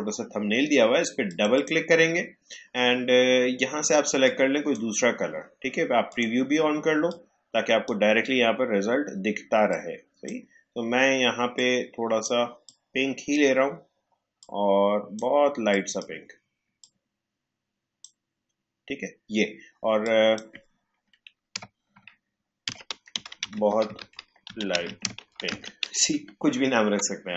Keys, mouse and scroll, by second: 1.2 click, 4.5-20.0 drag, 20.0-22.6 drag, 22.4-24.8 typing.